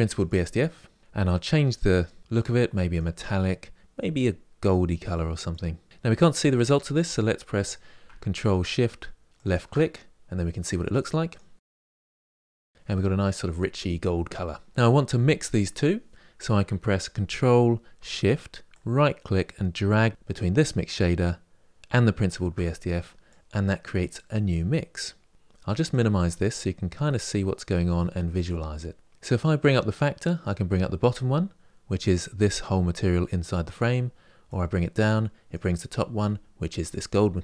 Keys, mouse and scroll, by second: 9.2 ctrl+shift+click, 12.4 click, 23.0-25.7 drag, 29.5-37.4 drag.